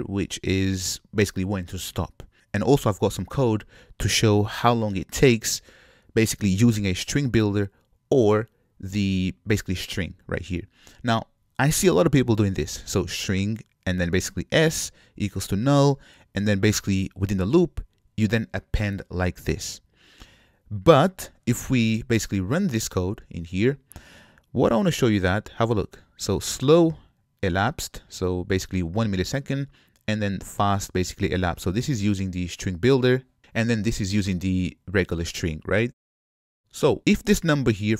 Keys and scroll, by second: 23.2 shift+F10.